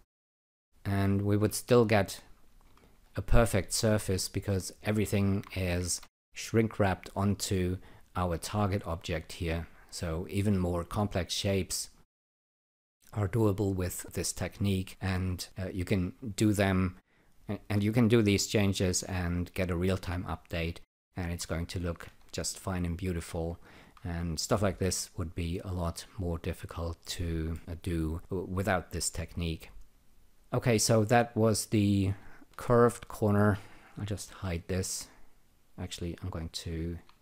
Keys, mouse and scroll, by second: 1.1 click, 3.0 alt+right click, 3.4 alt+click, 4.8 alt+click, 5.8 ctrl+r, 9.3-10.8 alt+drag, 11.5 alt+click, 13.8 alt+click, 16.3 alt+click, 18.6 alt+click, 20.2 alt+click, 22.0 ctrl+r, 24.5-26.0 alt+drag, 27.0 alt+middle click, 27.6 alt+click, 30.3 click, 32.4 alt+shift+click, 34.2 alt+g, 36.3 click, 36.8 ctrl+click.